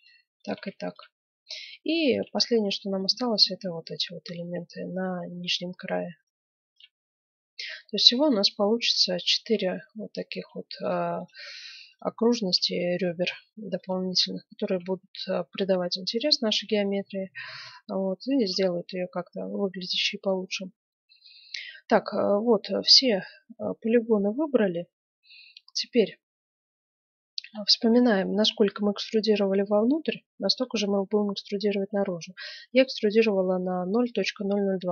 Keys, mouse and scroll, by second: 3.9 right click, 4.6-6.4 middle drag, 6.2-7.3 right drag, 6.9 middle click, 7.3-8.9 middle drag, 8.9 right click, 9.8-11.4 middle drag, 11.4 click, 11.4-14.8 right drag, 12.7-14.4 drag, 16.6 right click, 18.4-20.1 right drag, 20.1-25.1 middle drag, 20.4-21.4 scroll up 1, 27.5-29.4 middle drag.